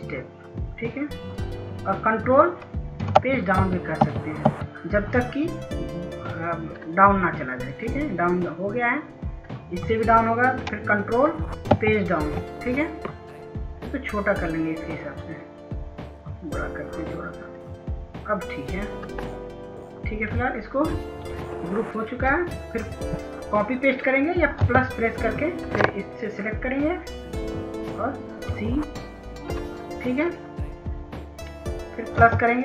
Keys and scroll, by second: 4.1 ctrl+Page_Down, 4.5 ctrl+Page_Down, 12.7 ctrl+Page_Down, 25.7 +, 29.6 e.